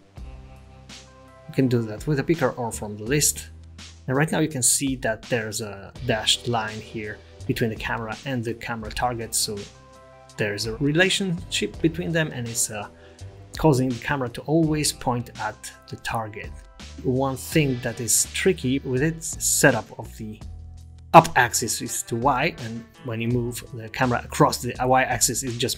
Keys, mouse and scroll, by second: 1.9 click, 3.2 click, 4.8 ctrl+z, 4.8 click, 6.0-6.6 scroll up 5, 6.6-7.5 scroll down 6, 7.9 click, 8.3 middle click, 8.6-9.3 scroll up 4, 12.5 click, 14.1 g, 20.3 KP_0, 22.1 g.